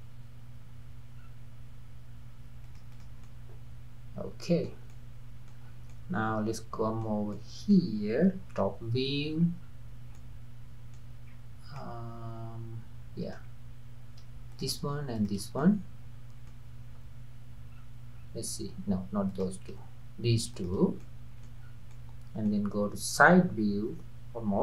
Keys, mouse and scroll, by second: 2.9 click, 3.3-5.7 middle drag, 5.7 scroll down 2, 5.9-7.3 middle drag, 7.3 scroll down 1, 7.4-8.6 middle drag, 8.6 KP_7, 9.4-9.7 scroll up 5, 10.2-11.4 middle drag, 11.4-11.8 scroll up 1, 11.8-13.4 middle drag, 13.4-14.4 scroll up 1, 14.4 scroll up 1, 14.5 shift+click, 15.2 shift+click, 15.6-17.0 middle drag, 17.0 KP_7, 17.8-18.4 scroll down 3, 19.3 click, 20.5 shift+click, 21.1 middle click, 21.6 scroll down 3, 21.9-24.6 middle drag.